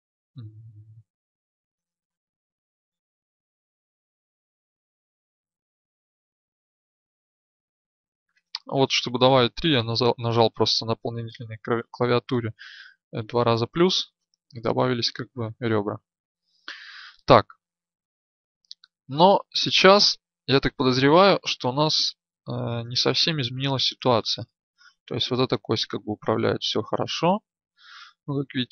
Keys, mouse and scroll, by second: 4.2 ctrl+r, 20.9 Tab, 22.0 right click, 23.6 click.